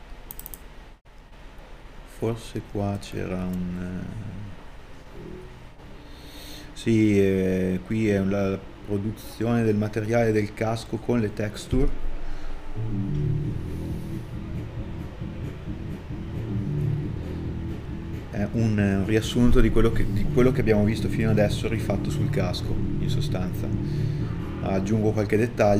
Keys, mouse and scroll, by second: 11.1 alt+right click, 11.8 middle click, 15.5 middle click, 17.5 right click, 23.6 middle click.